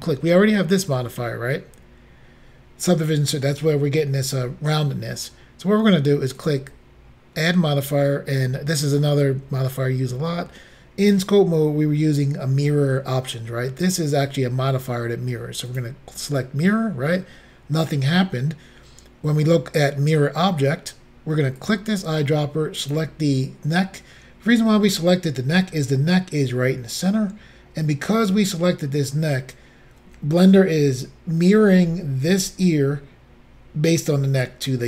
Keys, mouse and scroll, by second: 6.4 click, 15.8 click, 21.7 click, 22.9 click.